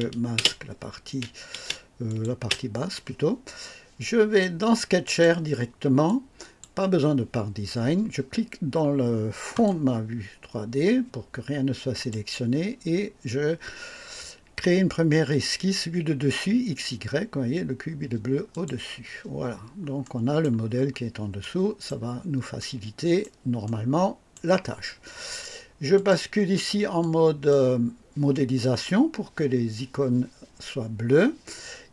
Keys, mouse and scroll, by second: 0.3-2.6 typing, 2.0 click, 5.0 click, 6.0 click, 9.5 click, 11.9 click, 18.5 click, 19.4-19.7 scroll up 1, 20.0-20.6 right drag, 20.7-21.0 scroll up 1, 21.4-22.0 right drag, 22.1 scroll down 1, 22.5-23.4 right drag, 23.6-24.5 right drag, 25.9 click, 27.0 click.